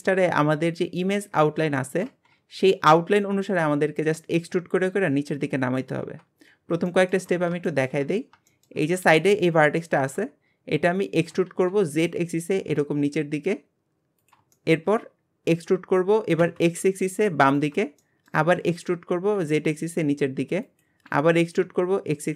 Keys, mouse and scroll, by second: 1.2-1.6 scroll down 12, 1.8-6.0 shift+middle drag, 6.5-6.9 scroll up 4, 6.9 shift+middle click, 7.3 scroll up 3, 7.7 shift+middle click, 8.0-8.5 scroll up 3, 8.5 shift+middle click, 8.8 scroll up 3, 9.8 shift+middle click, 10.3 scroll down 2, 11.2 e, 14.5 shift+middle click, 15.1 scroll up 3, 15.6 e, 18.0 shift+middle click, 18.6 e, 21.1 e.